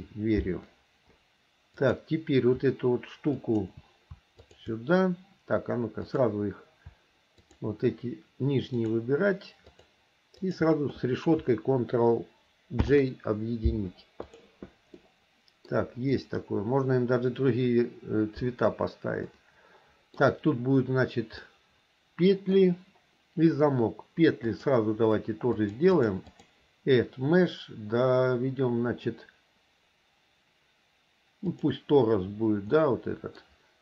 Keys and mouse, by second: 3.5 shift+click, 4.6 shift+click, 6.2 click, 7.6 shift+click, 9.0 shift+click, 9.8 shift+click, 13.0 ctrl+j, 15.2 click, 19.6 click, 21.6-22.7 middle drag, 24.6-26.1 drag, 26.4-31.9 drag, 32.9 middle click.